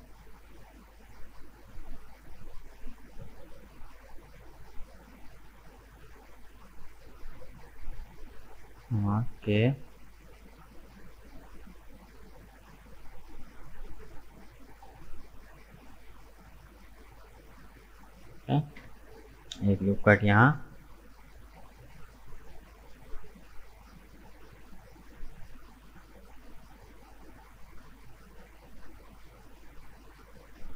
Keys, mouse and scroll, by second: 2.9-4.0 middle drag, 4.0 right click, 4.4-4.7 scroll up 2, 4.7-7.9 middle drag, 9.2 k, 19.7 Tab, 19.9 right click, 20.3 middle click, 21.2 right click, 21.5 Tab, 21.8-24.8 middle drag, 29.8-30.7 middle drag.